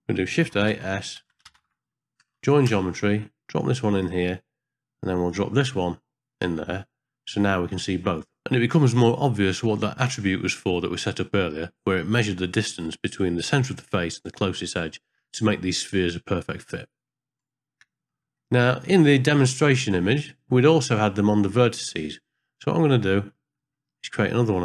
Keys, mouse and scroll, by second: 0.4 shift+a, 5.2 click, 5.4-6.5 drag, 7.5 ctrl+middle click, 8.2 middle click, 8.7 shift+middle click, 9.4 middle click, 10.1-11.1 middle drag, 11.4 shift+middle click, 11.8 middle click, 12.7 middle click, 13.2 middle click, 14.5 middle click, 16.9 ctrl+middle click, 17.3 middle click, 17.5 ctrl+middle click, 17.8 shift+middle click, 18.4 middle click, 19.9 middle click, 23.3 middle click, 23.6-24.6 scroll up 1.